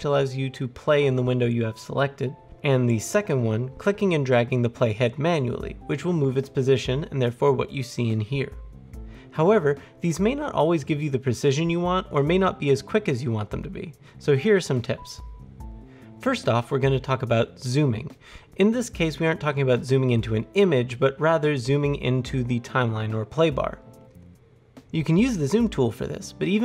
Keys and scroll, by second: 26.4 alt+scroll.